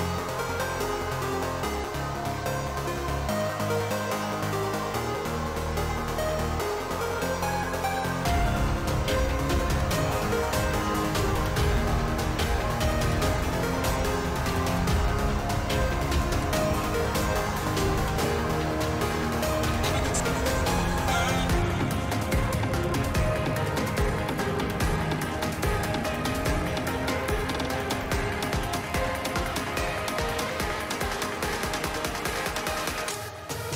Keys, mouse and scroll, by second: 1.1 middle click, 2.1 shift+a, 4.6 middle click, 5.0 click, 5.5 middle click, 6.1 middle click, 7.8 click, 8.2-9.2 drag, 9.6 middle click, 9.9 click, 11.9 ctrl+t, 12.7 middle click, 13.1 click, 13.4 click, 14.5 middle click, 15.1-16.3 drag, 17.8 middle click, 18.7 shift+middle click, 19.3 a, 20.3 s, 20.4 middle click, 21.3 middle click, 27.4 shift+middle click, 28.0 g.